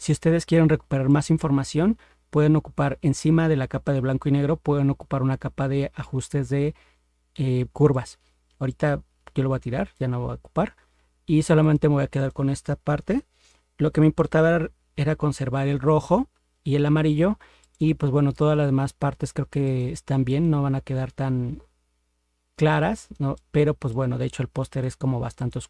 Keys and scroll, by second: 13.2 ctrl+-, 14.2 ctrl+0, 15.4 ctrl+=.